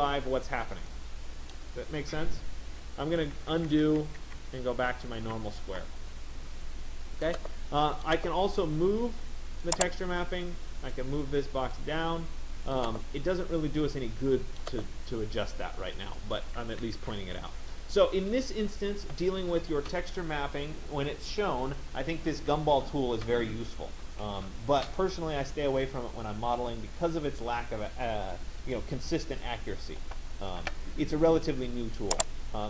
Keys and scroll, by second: 3.2 ctrl+z, 16.6 ctrl+z.